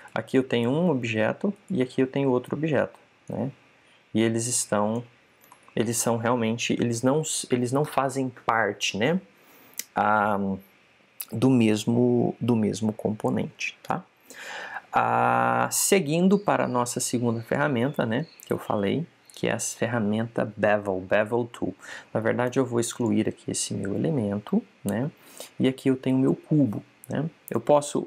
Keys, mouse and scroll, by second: 0.8-4.3 right drag, 4.1 click, 6.4 super+z, 23.4 x, 26.2 right click.